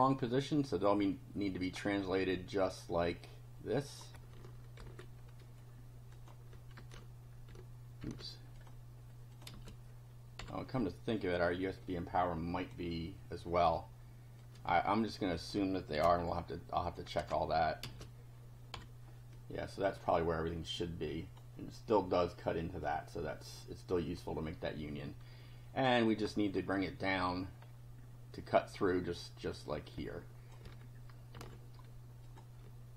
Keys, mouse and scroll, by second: 1.7 scroll up 1, 3.1-4.1 drag, 4.8 ctrl+c, 6.1 click, 6.8 ctrl+b, 8.0 ctrl+v, 8.6 ctrl+click, 9.3 click, 9.5 space, 10.4 F5, 11.2 click, 11.9-12.9 drag, 14.4-15.7 drag, 16.0 ctrl+c, 16.9 ctrl+click, 17.2 ctrl+v, 18.7 F5, 19.3 click, 20.1-21.5 drag, 22.9-24.3 drag, 26.3-27.3 scroll up 3, 27.6 scroll up 1, 29.7-30.7 drag, 31.3 ctrl+c, 32.3 click.